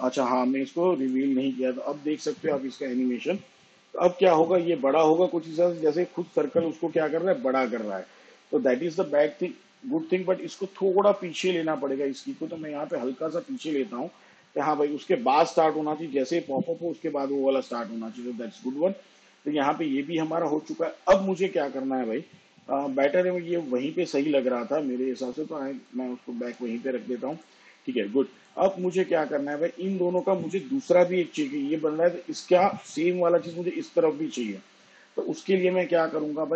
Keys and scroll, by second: 0.6 space, 4.4 space, 10.3 space, 16.0 space, 18.8 space.